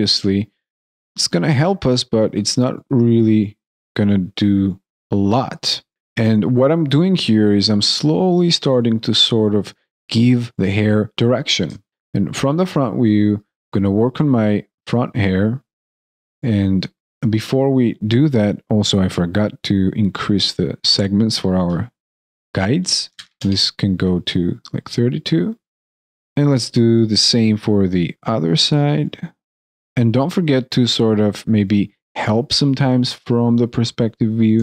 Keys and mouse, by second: 5.9 alt+right click, 11.6 alt+right click, 11.9 alt+middle click, 30.2 alt+middle click, 34.5 alt+middle click.